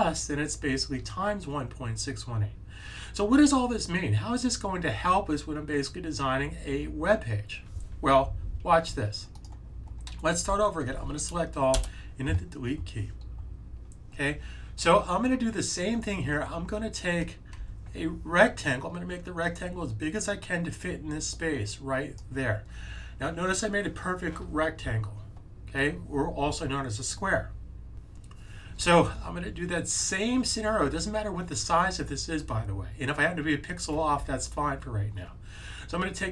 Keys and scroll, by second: 10.3 super+a.